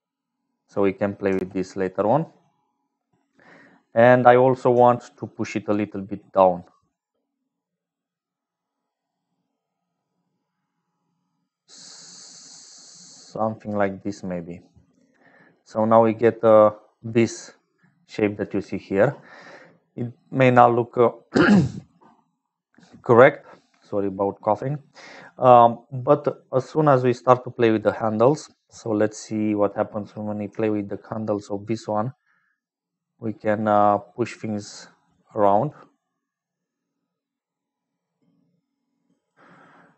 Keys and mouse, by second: 5.3-13.7 shift+drag, 14.6-15.6 drag, 16.7-17.8 middle drag, 20.3 click, 22.2 click, 24.9 click, 28.0 click, 29.4 click, 31.4-39.3 shift+right drag.